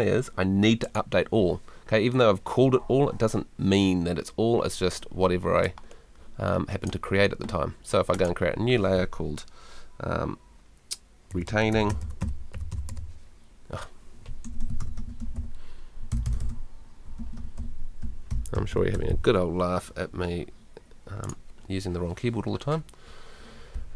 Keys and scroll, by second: 14.2-19.4 typing.